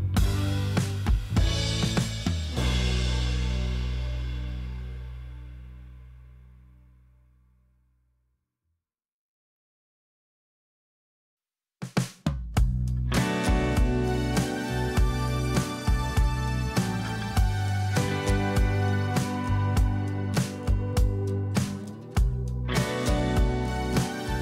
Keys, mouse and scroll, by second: 0.0-5.0 typing, 11.5 alt+scroll up 1, 20.4 alt+scroll up 1.